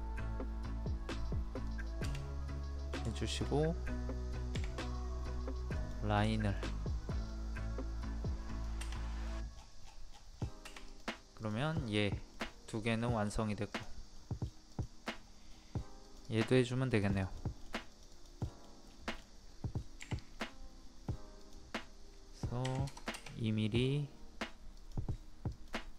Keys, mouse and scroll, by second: 2.2 middle click, 3.2 shift+middle click, 4.5 l, 5.7 click, 6.3-7.4 shift+middle drag, 8.5 click, 9.1 middle click, 9.1-9.5 scroll down 1, 9.6 scroll up 1, 9.8 scroll down 1, 10.2 scroll up 1, 10.3-10.9 scroll down 1, 10.9 click, 12.3 middle click, 13.7 click, 14.2 middle click, 14.7 click, 15.2 scroll up 1, 16.0 click, 16.6 scroll up 1, 17.0 click, 17.6 scroll up 1, 17.9 click, 18.4 middle click, 18.8 scroll up 1, 19.1-19.4 scroll down 1, 20.0-21.4 scroll up 1, 21.4 click, 22.6 KP_2, 23.7 scroll up 1, 24.8 click.